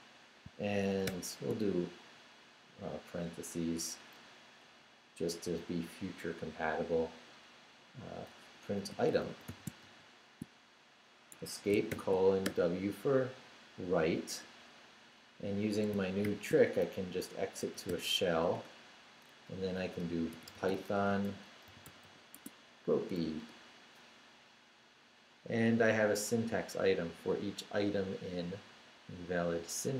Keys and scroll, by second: 1.0 shift+9, 8.7-10.3 typing, 11.9 shift+;, 12.4 shift+w, 13.2 w, 14.3 Return, 16.2 shift+;, 17.9 h, 18.5 Return, 19.7-22.5 typing, 23.4 Return.